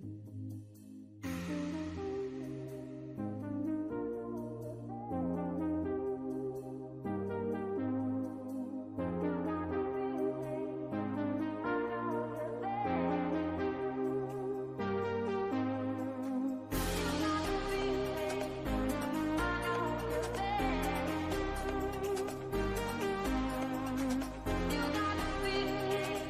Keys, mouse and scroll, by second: 0.1 alt+shift+click, 0.7 alt+shift+click, 2.6 x, 2.7 shift+middle click, 3.4 click, 4.0 x, 5.2 Tab, 5.5 shift+middle click, 5.7-6.0 scroll down 2, 6.0-7.2 shift+middle drag, 7.3-7.7 scroll up 1, 7.7 Tab, 9.2-10.2 drag, 11.2-12.6 drag, 14.3 w, 14.5 Tab, 15.1-18.0 middle drag, 18.0-18.4 scroll down 2, 18.4 click, 18.8 shift+middle click, 19.5 click, 20.2 /, 20.6 middle click, 20.9 scroll up 1, 21.0 middle click, 21.9 Tab, 22.4-23.1 scroll up 1, 23.1 shift+middle click, 23.8 scroll down 1, 24.3-26.2 shift+middle drag.